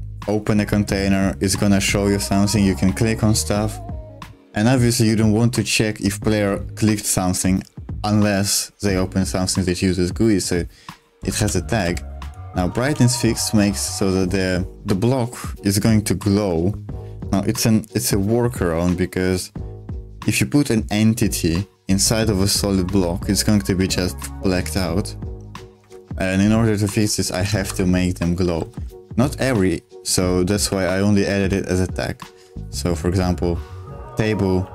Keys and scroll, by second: 11.4 v, 11.6 Escape, 11.8 j, 12.8 shift+v, 25.8 Escape, 27.3 shift+v, 27.6 Escape, 28.3 j, 28.6 k, 30.4-31.3 typing, 32.4-34.7 typing.